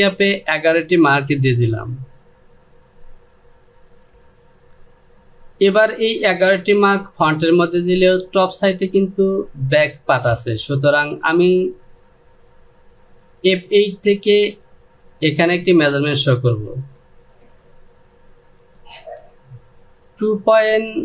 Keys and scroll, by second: 16.8 ctrl+space.